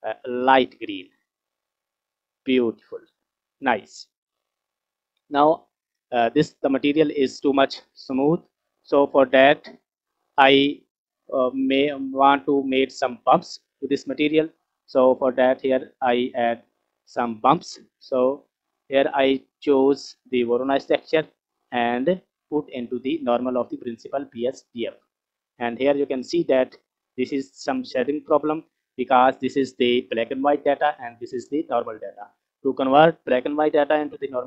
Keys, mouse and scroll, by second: 1.8-2.5 scroll down 4, 2.7 scroll up 2, 4.0-5.2 scroll down 8, 5.2-5.8 middle drag, 6.1 scroll up 2, 6.8 click, 7.3 scroll up 2, 7.9 scroll down 2, 8.4 click, 12.8-13.4 scroll down 3, 13.4 middle click, 14.3 click, 15.1-15.8 scroll up 1, 15.8 scroll up 4, 16.0 scroll down 1, 16.6 scroll up 2, 19.8-24.8 drag, 25.5-28.3 scroll up 2, 28.6-29.0 scroll down 2, 29.0 middle click.